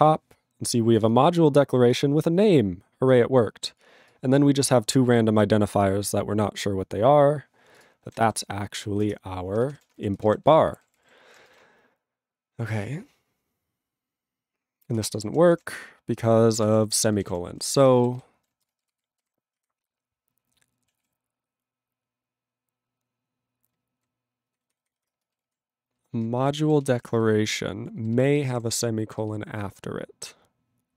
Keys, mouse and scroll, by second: 7.7 click, 7.8 click, 9.1 ctrl+Return, 9.8 alt+<, 10.1 ctrl+n, 10.2 ctrl+space, 10.2 ctrl+e, 10.4 ctrl+g, 10.7 ctrl+=, 15.0 ctrl+Return, 15.6 alt+<, 16.0 ctrl+n, 16.6 ctrl+e, 16.9 ctrl+n, 17.2 ctrl+e, 17.3 ctrl+n, 17.7 ctrl+s, 18.1 alt+b, 18.7 ctrl+space, 19.0 ctrl+alt+f, 19.2 ctrl+g, 19.5 ctrl+f, 21.0 ctrl+s, 23.7 ctrl+n, 24.5 ctrl+f, 25.2 ctrl+space, 25.5 ctrl+alt+f, 26.4 ctrl+g, 26.8 ctrl+s, 27.2 ctrl+alt+b, 28.0 ctrl+b, 28.4 ctrl+space, 28.4 ctrl+e, 28.5 ctrl+g, 29.4 ctrl+alt+b.